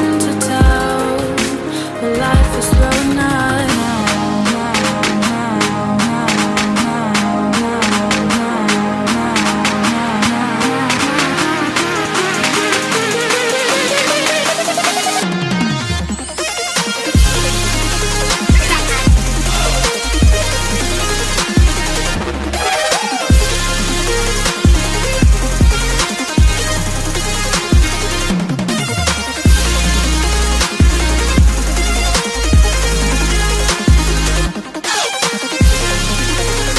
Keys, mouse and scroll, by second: 1.0-2.0 scroll up 1, 3.6 click, 4.6 right click, 5.1 click, 5.6 F10, 5.6 click, 6.2 right click, 7.4 click, 12.4-13.6 typing, 14.2 click, 14.5 F2, 15.3-19.3 typing, 20.2 click, 21.7-23.2 typing, 24.5 shift+p, 24.6 Return, 25.0 click, 25.5 click, 29.4-30.4 typing, 31.9 click, 32.2-34.8 typing, 35.8 click.